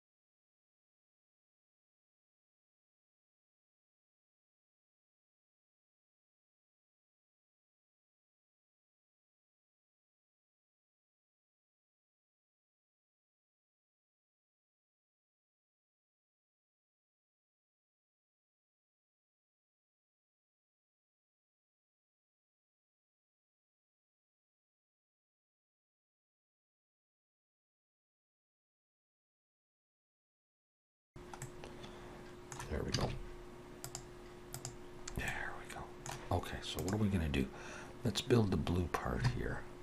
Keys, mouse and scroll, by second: 0.0 click, 0.4 alt+a, 0.4 middle click, 0.6 shift+middle click, 0.6 middle click, 0.8 Tab, 0.9 scroll up 2, 1.0 alt+a, 1.1 shift+middle click, 1.3 ctrl+r, 2.2 Tab, 2.2 scroll down 3, 2.4 middle click, 2.9 scroll up 2, 3.1 shift+middle click, 3.2 middle click, 3.5 shift+middle click, 4.6 scroll down 1, 4.6 shift+middle click, 4.8 click, 4.9 Tab, 5.2 alt+a, 5.6 2, 5.7 alt+shift+click, 6.0 scroll down 1, 6.2 click, 7.2 Tab, 7.3 scroll up 3, 7.4 alt+a, 7.5 scroll down 1, 7.6 shift+middle click, 7.6 middle click, 7.8 shift+middle click, 7.9 middle click, 8.3 scroll down 1, 8.4 shift+middle click, 8.6 middle click, 9.7 middle click, 10.7 middle click, 11.4 click, 11.5 Tab, 11.6 middle click, 12.2 2, 12.4 alt+shift+click, 12.7 middle click, 14.4 shift+middle click, 14.8 click, 16.2 middle click, 16.7 Tab, 16.8 shift+middle click, 16.9 middle click, 17.1 click, 17.2-18.1 scroll up 3, 17.2 Tab, 17.4 shift+middle click, 17.9 KP_Decimal, 18.2 alt+a, 18.3 scroll down 1, 18.5 KP_3, 18.7 z, 19.0 b, 19.2-19.6 scroll down 10, 19.6 shift+middle click, 19.9 click, 20.3 alt+a, 20.4 shift+middle click, 20.6 Tab, 20.7 click, 20.9 scroll down 2, 21.0 shift+middle click, 21.5-21.8 click, 21.6 click, 21.6 click, 22.1 click, 22.3 alt+a, 22.4 middle click, 22.6 Tab, 22.9 alt+a, 23.1 z, 23.5 Tab, 23.6 alt+a, 23.8 middle click, 24.5 click, 24.6 shift+middle click, 24.7 middle click, 25.3 Tab, 25.3 middle click, 25.4 a, 25.5 shift+middle click, 25.6 shift+middle click, 25.7 s, 26.5 Tab, 26.6 alt+a, 26.7 middle click, 26.9 scroll up 1, 27.0 click, 27.3 click, 27.8 alt+a, 27.9 middle click, 27.9 scroll down 2, 28.1 click, 28.2 x, 28.4 click, 28.7 shift+d, 28.9 click, 29.5 alt+a, 29.5 scroll down 3, 29.6 middle click, 29.8 scroll up 3, 29.8 middle click, 30.0 shift+middle click, 30.1 middle click, 30.4 scroll up 1, 30.5 shift+middle click, 30.6 middle click, 30.7 shift+middle click, 30.8 middle click, 31.2 Tab, 31.2 shift+s, 31.4 middle click, 33.0 shift+a, 35.0-35.4 scroll up 2, 35.3 middle click.